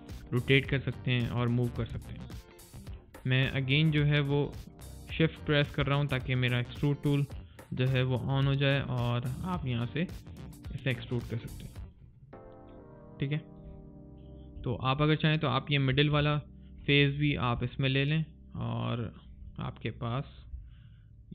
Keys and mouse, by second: 1.9 alt+right click, 2.2 alt+click, 2.7 alt+middle click, 3.1 alt+click, 3.3 alt+right click, 3.7 middle click, 4.0 right click, 4.4 middle click, 6.5 click, 12.3 alt+right click, 12.6 click, 17.1 right click, 17.7 click, 19.7 right click, 20.0 middle click, 21.0 click.